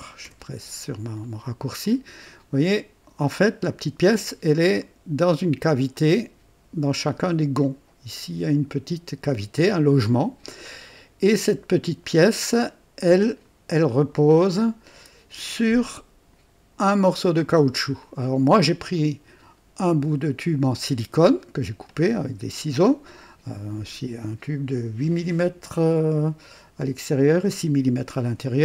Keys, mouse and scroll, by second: 0.2 &, 1.1 scroll up 2, 1.8-2.9 drag, 3.3-3.9 drag, 4.8-5.5 drag, 5.9-8.7 drag, 7.2 typing, 8.6 typing, 9.7-10.9 drag, 12.5-13.6 drag, 14.0 click, 15.3-15.8 typing, 15.8-16.5 drag, 18.0-18.8 drag, 19.0 right click, 19.6 typing, 23.0-23.8 drag, 28.2-28.6 drag.